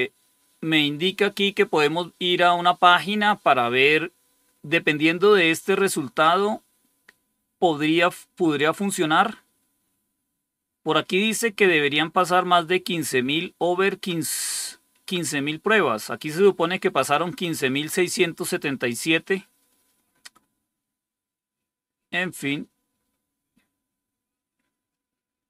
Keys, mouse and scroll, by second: 12.1 click, 19.6 scroll down 2, 22.0 scroll down 2.